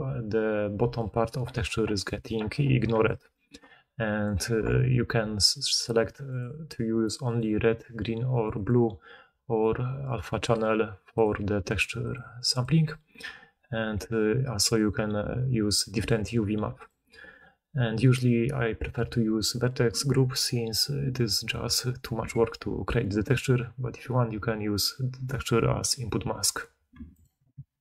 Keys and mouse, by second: 0.7-4.4 d, 2.2-7.2 right drag, 4.2-6.3 middle drag, 7.2 click, 7.3-8.5 right drag, 8.5 click, 8.6-10.4 right drag, 10.4 click, 10.5-11.1 right drag, 11.1 click, 11.2-12.0 right drag, 12.0 click, 12.1 right click, 12.4 click, 12.6-27.8 right drag, 14.6-16.8 drag, 27.2-27.8 drag.